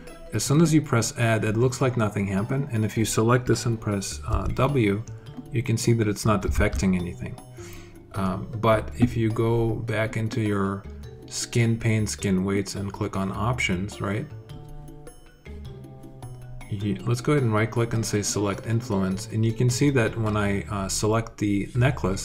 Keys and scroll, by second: 4.1 w, 6.4 super+z.